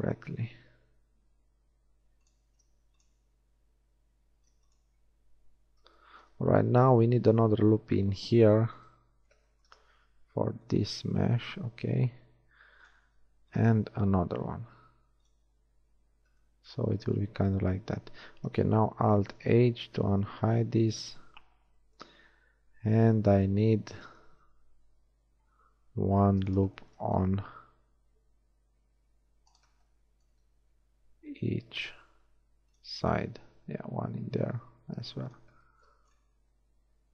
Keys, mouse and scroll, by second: 2.6 ctrl+r, 5.9 z, 7.5 ctrl+r, 10.1 ctrl+r, 13.2 ctrl+r, 16.1 Tab, 18.3 Tab, 19.4 alt+h, 20.6 a, 25.1 ctrl+r, 27.6 ctrl+r, 30.8 ctrl+r, 36.4 shift+middle click.